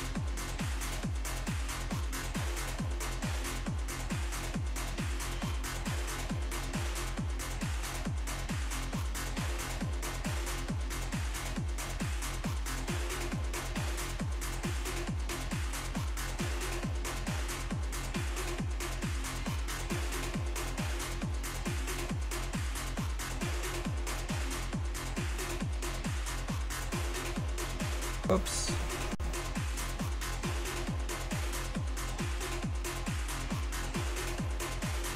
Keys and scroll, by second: 7.0 z, 9.1 z, 11.9 z, 26.6 ctrl+z, 27.3 ctrl+z, 29.7 z, 30.0 s.